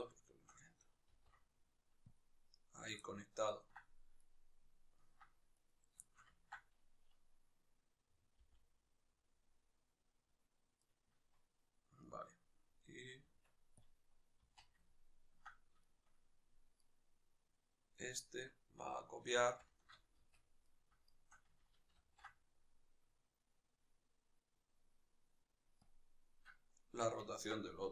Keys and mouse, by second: 0.0-1.9 shift+right drag, 1.9 ctrl+p, 2.8-4.0 ctrl+middle drag, 4.0 right click, 4.7-5.3 ctrl+middle drag, 5.3 right click, 5.8-13.7 shift+middle drag, 8.1 g, 13.7 Tab, 14.6-16.5 ctrl+middle drag, 16.5-25.8 right drag, 27.0-27.9 ctrl+middle drag, 27.6 z.